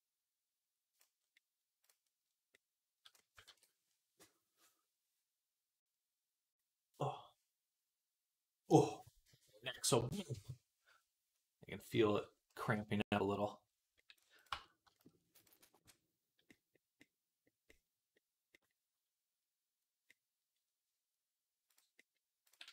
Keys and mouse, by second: 1.7-14.2 middle drag, 3.3 ctrl+s, 14.2 click, 14.3-17.4 middle drag, 14.3 Tab, 21.6 click.